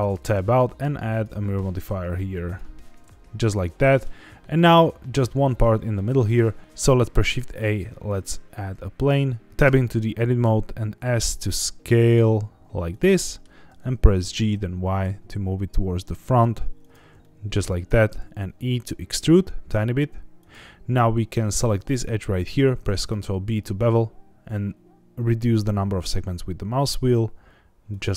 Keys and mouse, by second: 1.1 Tab, 1.1-2.5 drag, 3.1-4.0 middle drag, 5.4 middle click, 6.6 Tab, 7.0 shift+a, 9.5 Tab, 9.6 Tab, 10.4 s, 12.8 click, 13.1 middle click, 14.2 g, 14.5 y, 16.8 click, 17.2 middle click, 17.8 e, 20.4 click, 22.7 ctrl+b, 27.9 click.